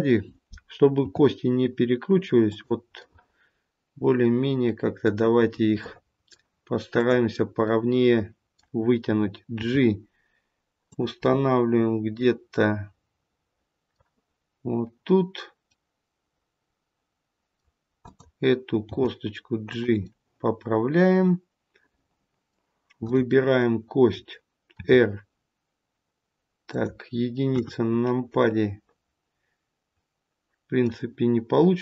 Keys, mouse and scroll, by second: 0.9 e, 2.9 middle click, 5.4 scroll up 2, 5.7 middle click, 6.9 click, 7.6 middle click, 9.5 g, 11.2 middle click, 15.6 middle click, 17.9 click, 18.8 g, 20.0 middle click, 21.8 middle click, 23.0 click, 23.5 middle click, 24.7 r, 27.4 KP_1, 28.2 middle click.